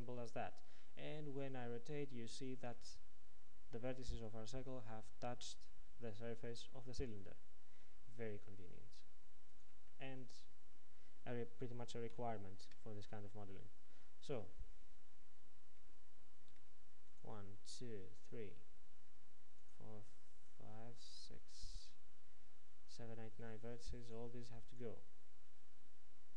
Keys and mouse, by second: 2.4-9.6 drag, 9.6-12.2 middle drag, 12.2 shift+KP_1, 19.8 c.